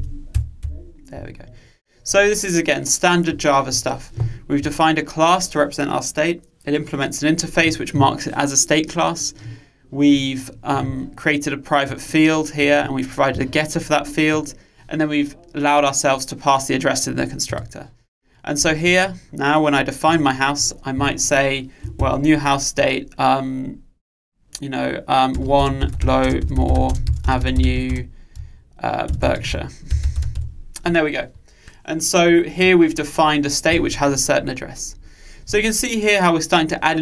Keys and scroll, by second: 0.4 Return.